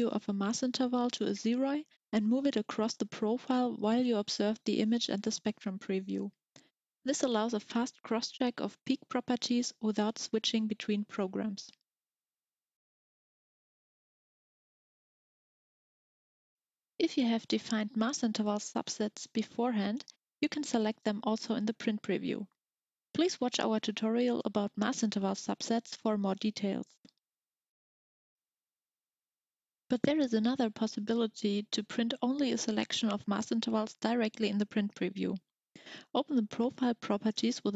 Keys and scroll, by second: 35.1-37.7 typing.